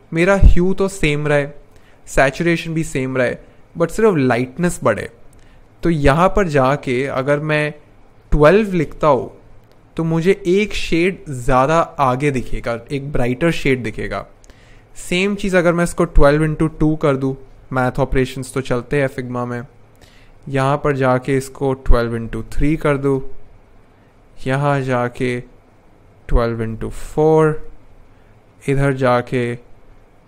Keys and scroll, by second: 8.1-9.6 typing, 15.4-17.2 typing, 17.2 Return, 21.6-23.2 typing, 26.1-27.7 typing.